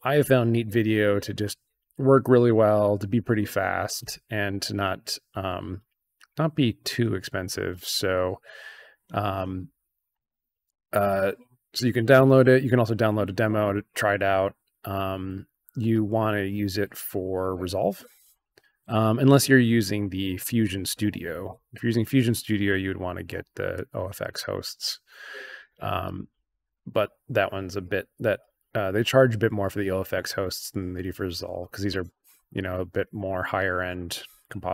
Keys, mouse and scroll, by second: 5.6 scroll down 2, 6.0 scroll up 2, 10.1 click, 14.3 scroll down 2, 23.7 click, 24.4 click, 26.0 click, 26.7 click, 32.5 click.